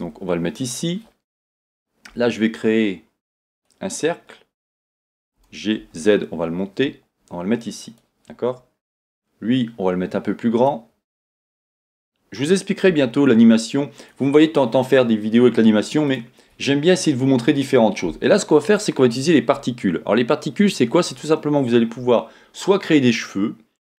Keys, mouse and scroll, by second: 0.7 click, 4.8 shift+a, 5.4 g, 8.0 click, 8.9 s, 10.6 click, 11.6 click, 12.9 g, 14.1 click, 16.1 click.